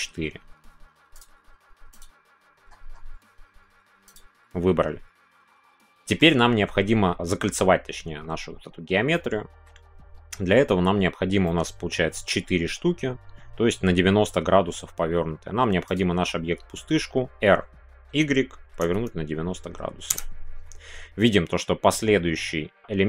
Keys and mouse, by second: 5.6 middle click, 9.1 middle click, 11.4 middle click, 18.7 KP_9.